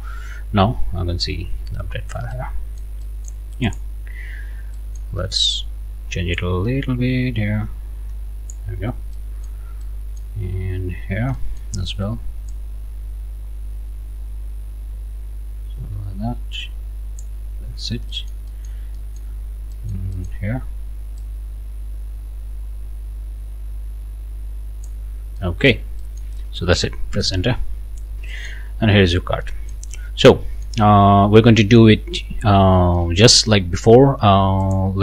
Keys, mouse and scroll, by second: 1.4 scroll down 2, 1.7 scroll up 2, 1.9 click, 2.3 click, 3.0 click, 3.6 click, 4.7 click, 5.1 scroll up 1, 6.3-8.7 drag, 8.8 scroll down 1, 9.1 click, 9.8 click, 10.9 click, 12.5-17.4 drag, 17.5 scroll down 1, 18.1 click, 18.2 middle click, 18.9 middle click, 19.5 scroll up 1, 19.7 middle click, 19.9 click, 21.2-25.0 drag, 25.1 scroll down 1, 25.4 click, 26.0 click, 27.1 Return, 27.9 scroll down 2, 28.3 right click, 28.9-29.2 scroll up 2, 29.4 click, 30.0 scroll down 1, 30.2 right click, 31.2-31.5 scroll up 1, 31.6 right click, 33.0 right click, 34.6 click.